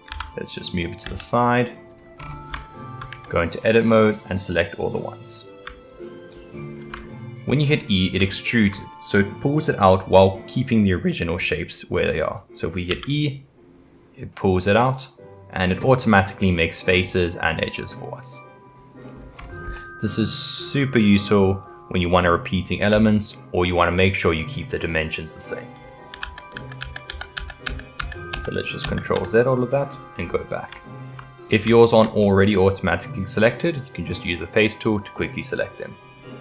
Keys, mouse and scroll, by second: 0.1 g, 2.5-3.1 shift+middle drag, 3.1 Tab, 4.0 click, 5.9 shift+click, 7.5-8.2 scroll up 2, 8.2-11.3 shift+middle drag, 12.9 e, 16.6-19.4 middle drag, 19.7-21.1 middle drag, 21.1 click, 22.9 e, 24.6-26.2 middle drag, 26.2 ctrl+z, 26.5 ctrl+z, 26.8 ctrl+z, 27.1 ctrl+z, 27.4 ctrl+z, 27.7 ctrl+z, 28.0 ctrl+z, 28.3 ctrl+z, 28.8 ctrl+z, 29.2 ctrl+z, 29.5 middle click, 30.2-30.7 scroll up 3, 30.7 shift+middle click, 31.4 scroll up 1, 31.7-36.4 shift+middle drag.